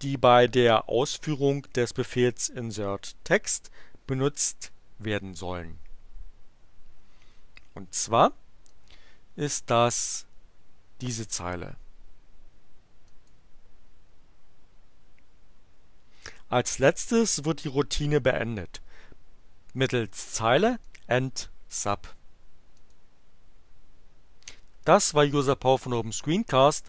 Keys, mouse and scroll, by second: 7.9 click, 8.7-11.3 drag, 13.1 click, 20.8-21.9 drag, 22.8 click.